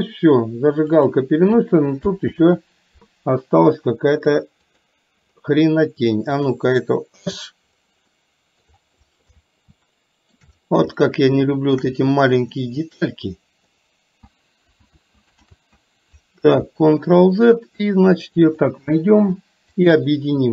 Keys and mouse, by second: 2.4 ctrl+z, 4.3 click, 7.2 h, 8.2 middle click, 9.8 shift+middle click, 11.1 shift+middle click, 12.8 middle click, 13.8 middle click, 14.2 ctrl+z, 14.9 ctrl+z, 15.6 ctrl+z, 18.5 click, 19.8 shift+click.